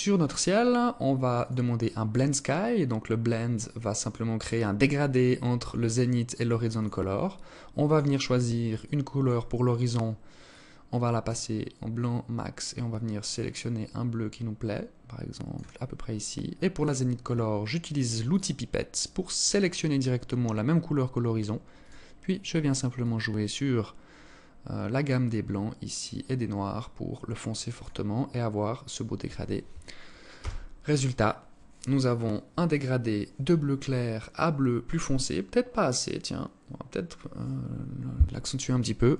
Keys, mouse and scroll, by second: 0.9 click, 6.3 click, 16.3 click, 21.3 click.